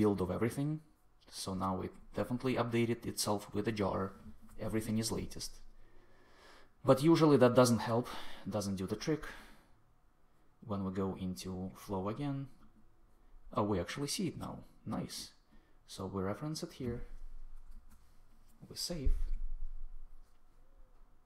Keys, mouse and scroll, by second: 17.6 super+s.